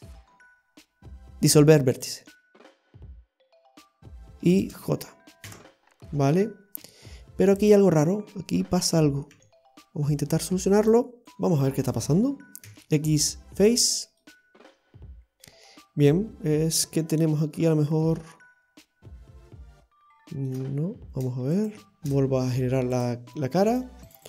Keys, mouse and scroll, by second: 3.1 scroll up 2, 4.0 right click, 4.5 shift+right click, 5.5 j, 5.8 i, 6.2-6.6 scroll down 1, 6.6-7.0 scroll up 1, 7.6 scroll up 1, 7.6 right click, 9.5 e, 10.4 click, 10.8 right click, 11.2 middle click, 11.2 click, 11.2-11.8 scroll down 2, 11.8 right click, 12.7 x, 14.2 middle click, 21.6 right click, 23.0 click, 23.8 right click, 24.1 alt+shift+right click.